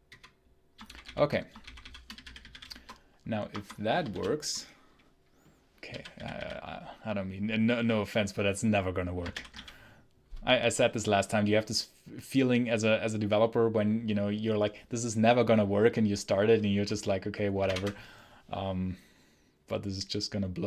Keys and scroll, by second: 0.0-4.2 typing, 3.3 Escape, 5.5-6.8 typing, 9.2 ctrl+alt+l, 9.4 ctrl+alt+k, 17.5 shift+F10.